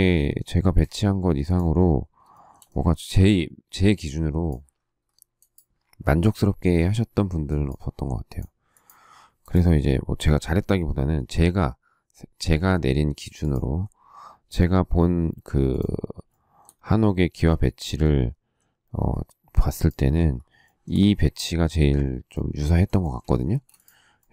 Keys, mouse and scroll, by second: 0.4 space, 0.6 Escape, 2.3 shift+middle click, 12.3 q, 16.2 shift+middle click, 20.6 shift+middle click, 23.0 shift+middle click, 23.4 space.